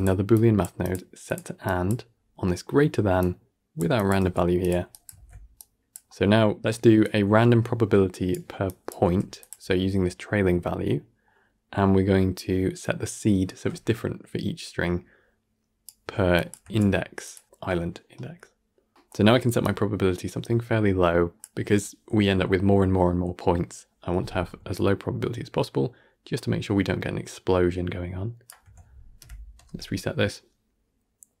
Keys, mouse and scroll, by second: 0.2 click, 0.7-1.5 drag, 2.0-2.3 scroll up 5, 2.3-3.1 middle drag, 3.1 drag, 3.9 click, 4.1 g, 4.8 drag, 5.0 ctrl+x, 5.4 click, 6.1 scroll down 1, 6.2 middle click, 6.9 click, 8.9 g, 10.8-12.7 middle drag, 12.7 click, 16.2 click, 16.5 g, 17.5 click, 17.8 g, 18.6 scroll down 1, 18.8 scroll up 1, 18.8 middle click, 19.5-22.6 drag, 24.6-27.7 shift+drag, 29.2 shift+Left, 29.4 shift+space.